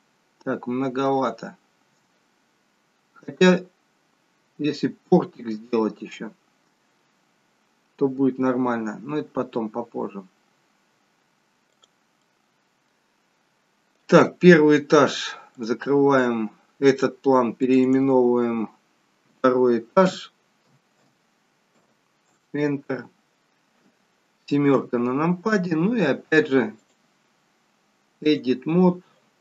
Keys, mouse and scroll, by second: 1.8 s, 12.2 middle click, 15.9 click, 16.8 click, 24.7 KP_7, 26.8 click.